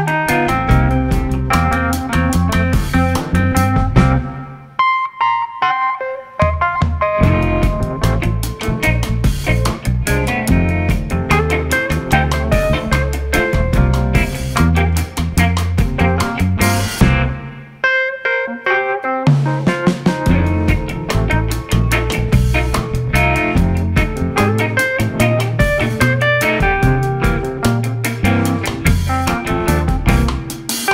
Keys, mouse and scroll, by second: 0.5 KP_Divide, 1.4 scroll down 1, 1.7-4.7 middle drag, 5.3 Tab, 7.3 middle click, 8.0 Tab, 8.5 middle click, 10.2-12.9 drag, 12.9 ctrl+a, 13.5-14.5 right drag, 14.5-16.5 middle drag, 16.5 shift+s, 24.8 scroll up 1, 25.1-27.8 middle drag, 27.8 g.